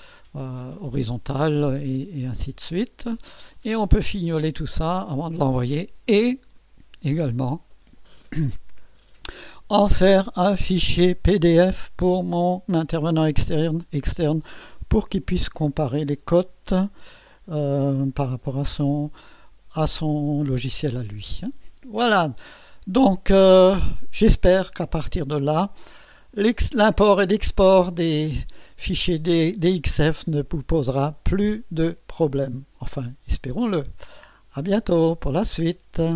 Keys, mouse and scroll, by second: 1.8-3.3 scroll down 8, 3.5 middle click, 4.4 scroll down 2, 4.6 scroll up 2, 4.8 scroll down 2, 5.4-6.5 middle drag.